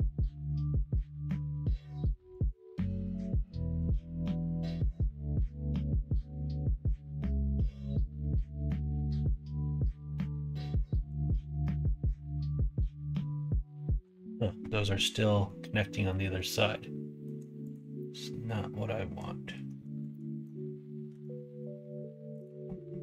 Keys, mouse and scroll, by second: 0.0 alt+z, 0.5-2.4 drag, 2.9 click, 3.3 click, 3.6 alt+z, 3.8 click, 4.5 alt+z, 5.0-6.1 drag, 6.4-7.6 middle drag, 8.2-11.1 drag, 11.2 ctrl+z, 11.5-12.7 middle drag, 14.9 middle click, 15.6-17.2 middle drag, 17.6 click, 17.9-19.1 middle drag, 20.0 ctrl+middle click, 21.0 k.